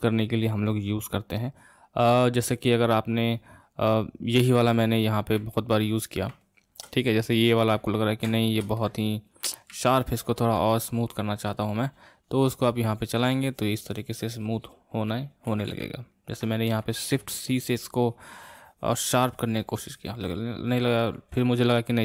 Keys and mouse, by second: 5.5-9.3 middle drag, 9.3 click, 9.9-12.3 middle drag, 12.3-15.4 drag, 15.6 ctrl+z, 15.8 ctrl+z, 17.1 shift+c, 18.1-21.1 drag.